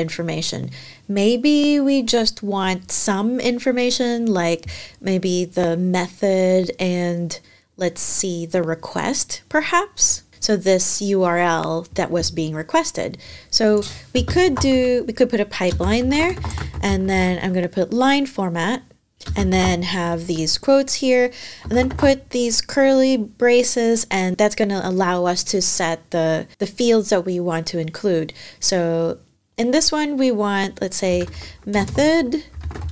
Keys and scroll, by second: 13.9 space, 15.2-18.1 typing, 19.1-22.0 typing, 30.6-32.9 typing.